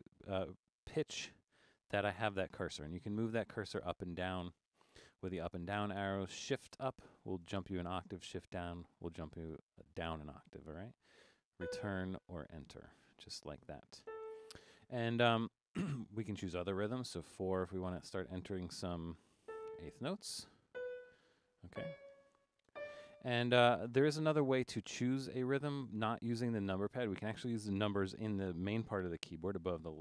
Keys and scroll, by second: 0.1 Down, 0.3 Down, 0.8 Down, 1.3 Up, 1.5 Up, 1.6 Up, 2.0 Down, 2.1 Down, 2.3 Down, 2.4 Down, 2.6 Down, 3.0 Up, 3.2 Up, 3.3 Up, 3.5 Up, 3.7 Up, 3.8 Up, 4.4 Up, 4.6 Down, 4.8 Down, 5.0 Down, 5.1 Down, 5.3 Down, 5.3 Down, 5.5 Down, 5.7 Down, 6.7 shift+Up, 7.4 shift+Up, 8.1 shift+Down, 8.9 shift+Down, 10.2 Up, 10.4 Up, 10.7 Up, 11.2 Up, 11.5 Return, 13.3 Down, 17.3 4, 20.2 Up, 21.4 Up, 22.3 Up.